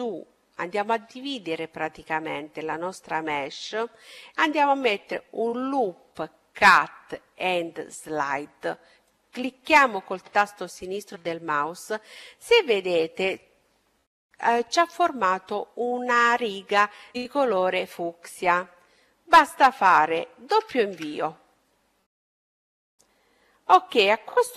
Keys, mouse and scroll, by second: 0.0-1.9 middle drag, 3.9-6.0 middle drag, 9.0-11.0 drag.